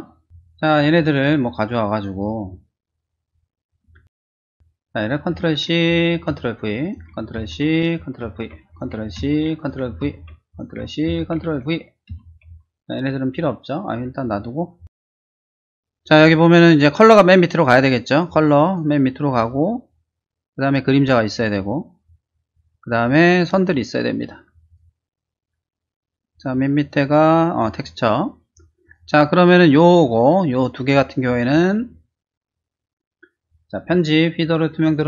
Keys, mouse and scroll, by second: 1.2 click, 1.6 click, 2.0 click, 2.7 click, 5.3 ctrl+c, 5.7 click, 6.3 ctrl+v, 6.8 click, 7.3 ctrl+c, 7.7 click, 8.2 ctrl+v, 8.7 click, 9.2 ctrl+c, 9.6 click, 10.0 ctrl+v, 10.5 click, 11.1 ctrl+c, 12.1 ctrl+v, 14.9 click, 16.2 click, 18.2 click, 19.5-20.6 drag, 21.3 click, 23.0 click, 23.5 click, 24.6 click, 26.6 alt+click, 27.5 alt+click, 28.8 click, 31.2-32.4 drag, 34.5 click.